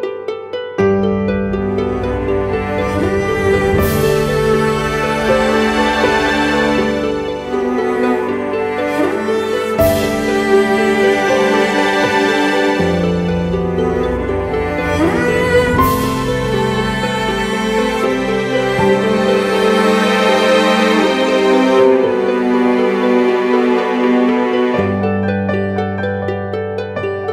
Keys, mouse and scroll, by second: 2.1 double click, 22.4-22.7 typing.